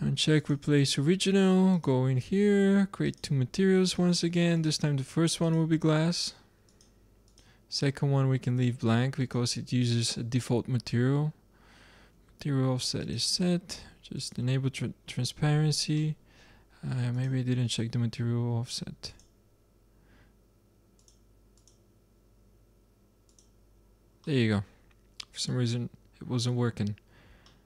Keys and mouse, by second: 9.1 middle click, 9.2-10.9 drag, 13.0-16.0 drag, 16.0-17.1 middle drag, 17.1-18.8 drag, 19.1-20.8 drag, 21.0-25.0 drag, 24.3-26.3 middle drag, 27.4-27.6 middle drag.